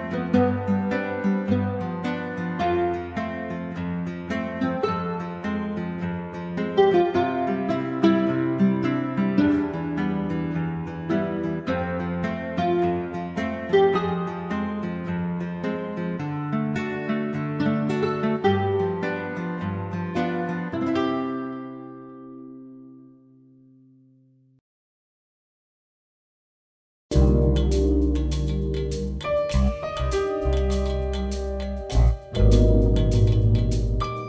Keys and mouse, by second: 0.5 r, 0.7 g, 1.8-2.8 drag, 2.9 i, 3.4 click, 4.2 g, 5.1 r, 5.2 g, 6.3-7.8 typing, 9.6-13.6 typing, 12.8 right click, 14.9-17.4 typing, 17.9 click, 19.1 a, 19.4 b, 19.8 ctrl+c, 20.4 ctrl+v, 20.7 drag, 21.3-24.3 drag, 21.6 n, 24.6-25.2 drag, 24.6 a, 24.6 g, 26.0 click, 26.7 g, 27.0 g, 27.5 click, 27.6 ctrl+v, 28.2 g, 28.5 r, 28.6 g, 28.8 click, 30.2 click, 30.5 i, 31.0 click, 31.6 i, 31.6 a, 32.2 click, 32.8 ctrl+c, 33.5 ctrl+v.